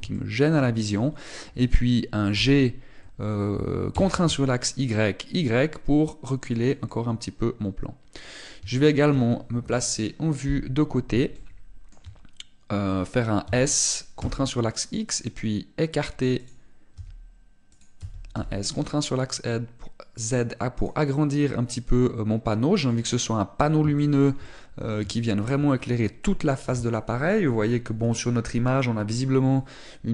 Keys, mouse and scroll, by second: 0.9 shift+middle click, 3.1 g, 7.4 click, 7.6 middle click, 9.5 shift+middle click, 10.4 KP_1, 12.1 shift+middle click, 14.2 s, 17.2 click, 17.7 s, 18.6 click, 18.8 s, 21.6 click, 21.9 middle click, 24.0 middle click, 24.7 shift+middle click, 25.2 middle click, 25.9 shift+middle click.